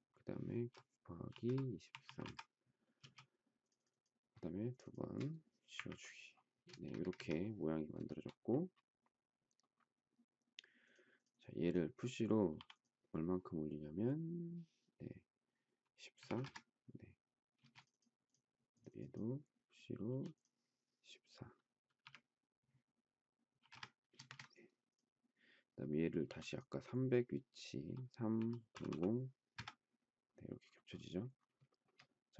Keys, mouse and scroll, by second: 1.0-2.9 typing, 4.7 shift+click, 4.8 shift+double click, 5.7 Delete, 6.6 space, 6.8 Escape, 6.9 Escape, 8.1 shift+middle click, 12.5 p, 16.0 typing, 16.3 Return, 17.6 space, 20.1 p, 21.9 1, 23.5 4, 23.6 Return, 24.1 space, 24.2 Escape, 26.2 m, 28.0 3, 29.1-29.9 typing, 31.6 shift+middle click.